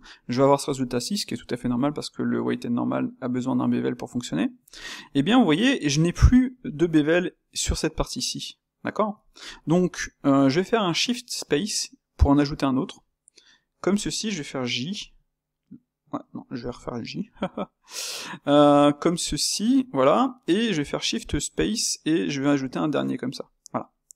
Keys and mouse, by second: 0.3-4.1 middle drag, 5.1-8.7 shift+middle drag, 9.2-12.6 middle drag, 17.2-20.3 middle drag.